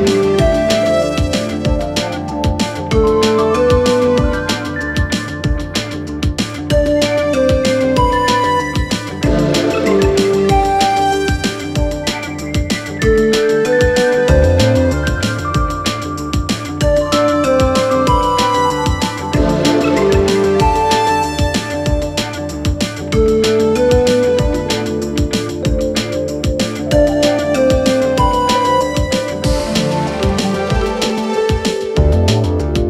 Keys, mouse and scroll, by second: 0.0 alt+click, 0.2 alt+click, 1.1 alt+shift+click, 2.1 alt+shift+click, 2.5 alt+click, 3.1 alt+shift+click, 3.4 alt+shift+click, 3.9 alt+shift+click, 4.2 alt+click, 4.8 click, 5.5 alt+click, 5.9 click, 6.7 alt+click, 7.4 alt+shift+click, 7.8 alt+shift+click, 8.5 alt+shift+click, 8.7 alt+shift+click, 9.4 alt+shift+click, 10.2 alt+shift+click, 10.5 alt+shift+click, 11.9 shift+click, 12.2 shift+click, 13.1 click, 13.3 middle click, 14.1 shift+click, 14.3 shift+click, 15.0 click, 16.6 click, 16.9-18.8 drag, 20.3 click, 23.8 click, 24.0 click, 24.3 click, 24.5 click, 25.3 click, 26.0 click, 27.7 click, 27.9 click, 28.1 click, 28.9 shift+a, 30.3 s, 31.5-32.2 scroll up 3, 32.2 click.